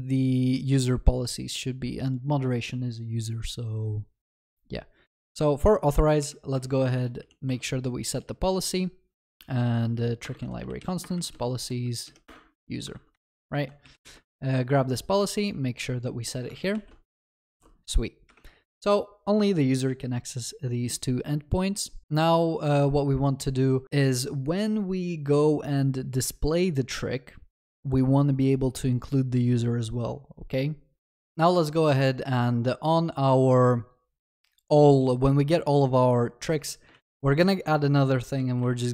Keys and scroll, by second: 7.5 Return, 12.9 ctrl+w, 13.8 ctrl+c, 14.0 ctrl+s, 37.0 ctrl+d.